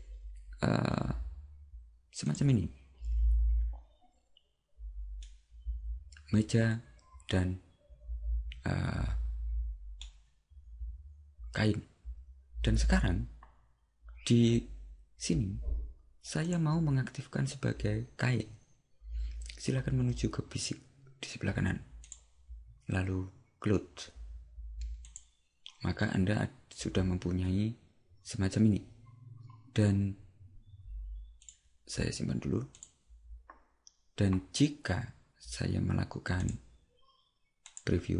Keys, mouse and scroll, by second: 5.2 middle click, 16.5 click, 22.1 click, 31.5 click, 36.4 click.